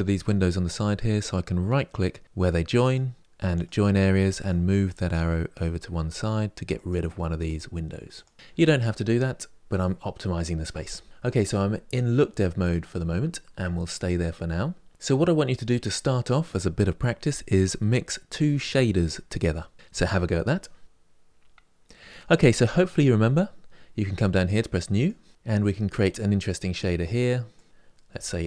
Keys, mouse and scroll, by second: 3.3-8.9 right drag, 8.9-16.1 shift+middle drag, 24.8-26.8 drag.